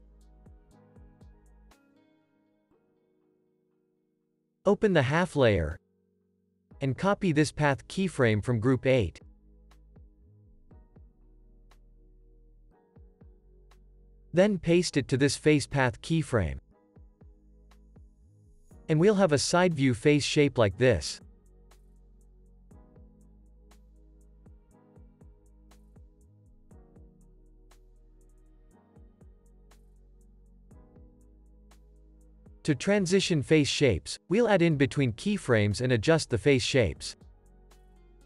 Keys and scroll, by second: 0.3 z, 1.6 super+s, 2.9 space, 13.5 super+c, 18.5 super+v, 24.8 super+=, 25.5 space, 28.6 Right, 29.5 Left, 29.9 Right, 31.2 super+-.